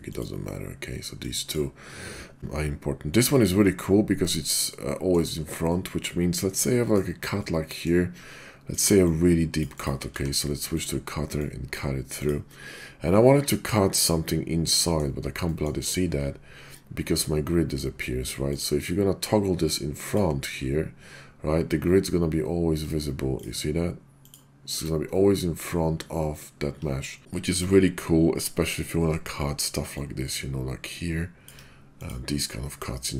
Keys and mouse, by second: 0.1-4.4 drag, 4.6-5.1 middle drag, 5.7-7.0 middle drag, 7.4-7.8 middle drag, 8.6 click, 9.0-9.6 drag, 9.8 drag, 10.1 d, 11.3-11.7 drag, 12.2 click, 13.1-13.9 middle drag, 14.7 middle drag, 15.5 middle click, 18.5-20.4 drag, 23.4-24.4 drag, 30.0-31.5 ctrl+drag, 32.0 click, 32.4-33.1 middle drag.